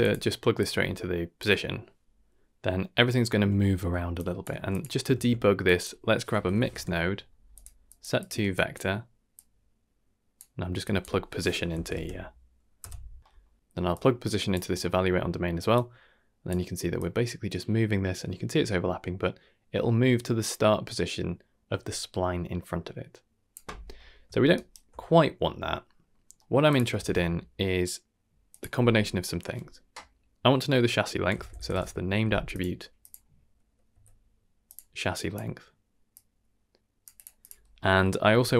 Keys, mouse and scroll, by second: 0.5-1.3 drag, 3.6 shift+middle click, 4.1-4.5 drag, 4.5 g, 5.1 shift+a, 7.9 click, 8.1 click, 8.5 click, 9.3-10.3 drag, 10.8-13.2 drag, 13.2 middle click, 13.2 scroll down 1, 13.6 middle click, 13.7 shift+d, 13.9-14.5 drag, 14.8 middle click, 15.7 click, 16.9-23.5 drag, 23.9 middle click, 24.5 ctrl+right click, 25.1 middle click, 25.7 middle click, 26.1 scroll up 2, 26.4 middle click, 26.7 click, 26.9 shift+a, 33.0-34.7 drag, 35.1 click, 36.1-37.1 drag, 37.3 click, 37.8 middle click, 38.4 shift+d.